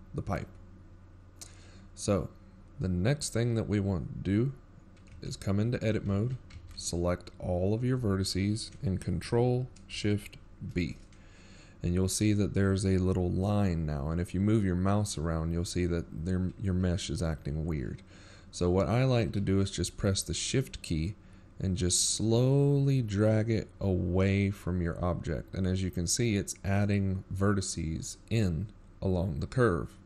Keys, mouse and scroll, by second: 1.2 middle click, 1.6-2.2 scroll down 5, 2.2 middle click, 3.1-3.6 shift+scroll up 9, 3.6 Tab, 3.9-4.3 scroll down 4, 4.4 shift+scroll up 2, 4.8 middle click, 9.5-10.3 scroll up 1, 10.3 Tab, 11.3 a, 16.0 ctrl+shift+b.